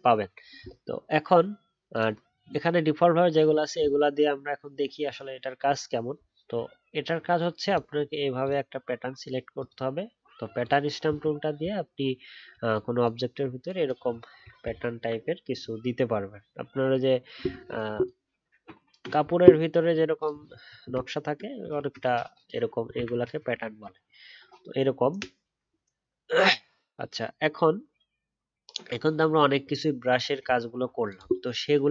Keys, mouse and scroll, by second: 14.6-16.7 alt+scroll down 1, 21.0-21.6 alt+scroll down 1, 21.6-22.0 alt+scroll up 1, 23.5 alt+scroll down 1.